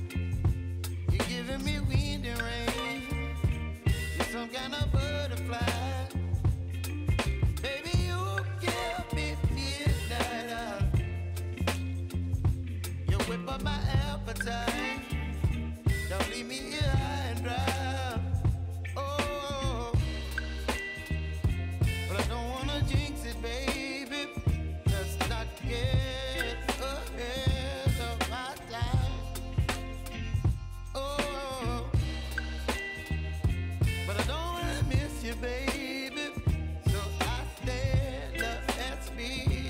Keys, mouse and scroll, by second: 3.1 scroll down 1, 4.0-5.5 drag, 5.5 F9, 6.6-10.5 drag, 10.5-13.3 drag, 13.3 space, 15.2-17.3 drag, 22.5 [, 23.6 click, 25.5 [, 26.6 click, 27.7 [, 28.2 space, 30.4 space, 33.3 u, 35.2 click.